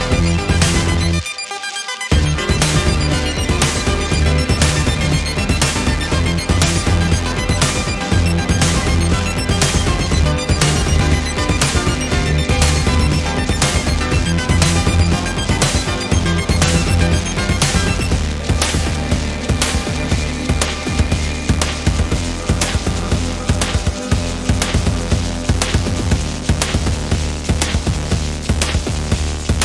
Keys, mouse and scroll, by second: 1.8 ctrl+KP_Multiply, 3.4-4.1 ctrl+scroll down 3, 4.9-5.5 scroll up 4, 6.6 d, 7.4 scroll up 2, 8.5 click, 9.9 click, 10.7 click, 12.3 click, 13.8 click, 15.6-17.6 drag, 17.9 click, 19.5-21.7 drag, 22.2 click, 23.5-26.8 drag, 27.6 click, 28.4 click, 29.5 ctrl+d.